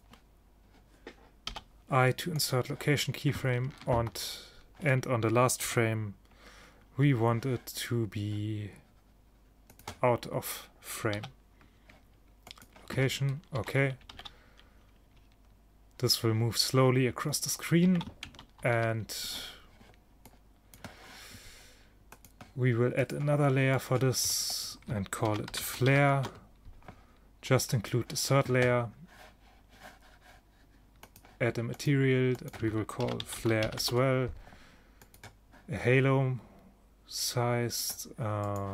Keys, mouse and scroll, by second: 1.5 i, 4.0 ctrl+shift+Up, 5.7 g, 11.2 i, 13.6 ctrl+shift+Down, 14.2 alt+a, 18.0 alt+a, 18.7 ctrl+shift+Down, 23.2-26.4 drag, 27.7-29.7 drag, 31.1-34.3 drag, 35.1-36.7 drag, 38.5-38.7 drag.